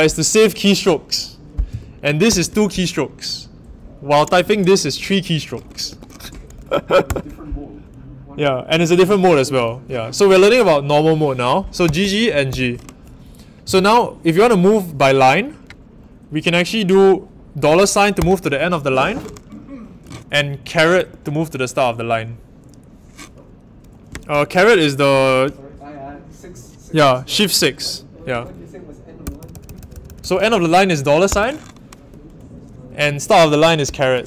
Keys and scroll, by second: 2.2 shift+g, 4.4 shift+;, 5.9 shift+4, 7.0 Return, 11.8 g, 11.9 g, 12.4 shift+g, 18.2 shift+4, 21.0 shift+6, 29.2-30.2 typing, 31.3 shift+4, 33.8 shift+6.